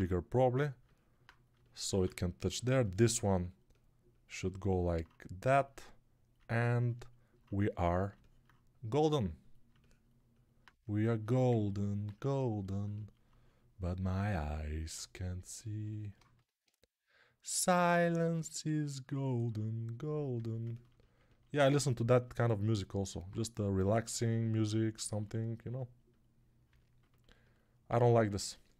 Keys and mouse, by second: 1.8 alt+q, 27.9 alt+q.